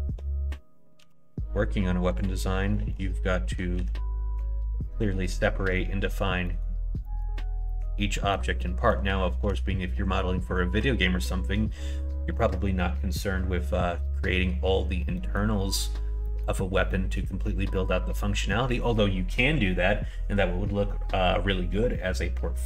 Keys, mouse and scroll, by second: 2.7 middle click, 4.9 middle click, 6.4 middle click, 7.0 middle click, 7.6 middle click, 8.1 middle click, 8.5 middle click, 15.1 middle click, 16.2 middle click, 16.9 middle click.